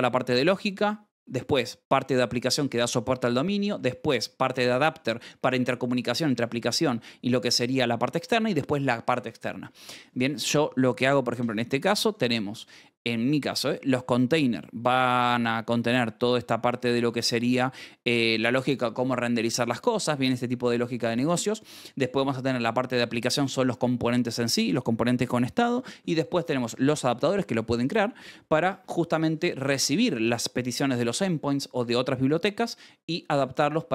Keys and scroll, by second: 9.6 Escape, 11.7 shift+v, 11.9 Escape, 21.2 Escape, 21.5 k.